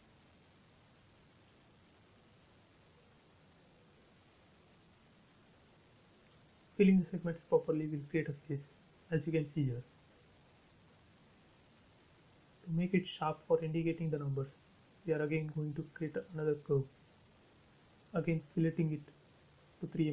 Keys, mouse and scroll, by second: 0.6 shift+middle click, 1.2-3.5 scroll up 1, 3.6 l, 4.2 click, 6.3 space, 6.4 click, 6.8 scroll down 1, 8.3 shift+middle click, 9.4 shift+a, 10.2 shift+click, 13.3 shift+click, 14.8 shift+space, 15.7 shift+click, 16.8 shift+f, 18.2 shift+click, 19.2 shift+3, 19.6 shift+m, 20.0 shift+Return.